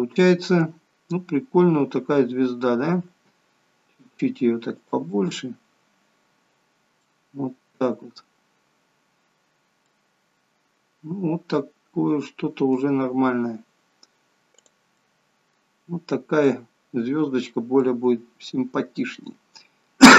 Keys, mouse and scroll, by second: 3.1 s, 5.2 middle click, 10.0 middle click, 14.7 click, 15.1 middle click, 16.5 middle click, 17.9 middle click.